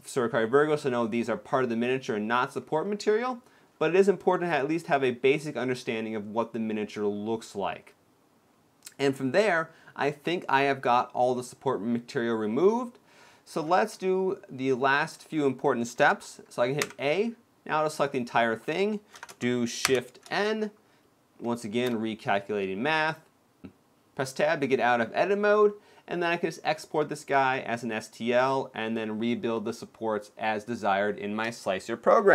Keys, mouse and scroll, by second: 2.5 shift+middle click, 3.4 shift+middle click, 3.6-4.4 scroll down 3, 4.4 middle click, 9.6-10.2 scroll down 2, 10.0 middle click, 13.2-13.7 scroll down 1, 13.7-15.0 scroll up 1, 15.0-16.0 scroll down 3, 15.1-16.0 scroll up 1, 16.0 scroll down 1, 16.0-16.5 scroll up 2, 16.6 a, 19.6 shift+n, 19.6 shift+m, 23.4 Tab, 24.2 middle click.